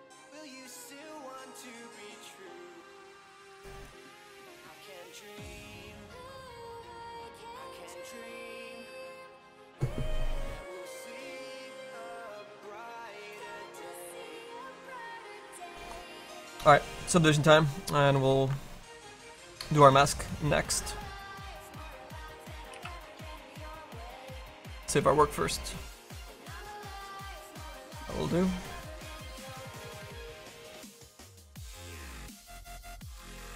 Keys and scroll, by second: 0.5 space.